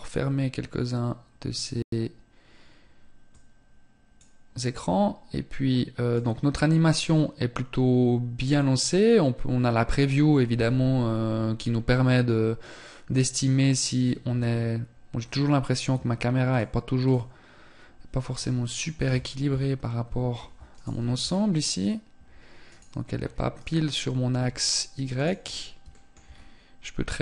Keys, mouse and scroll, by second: 5.4 click, 9.7 n, 15.7 click, 18.7 KP_7, 19.9 right click, 20.2 h, 20.4 scroll down 4, 21.9 right click, 22.4-22.7 scroll down 1, 22.7 right click, 23.6 h, 24.3 right click, 24.7-25.7 scroll up 4, 25.1 shift+middle click, 26.7 n.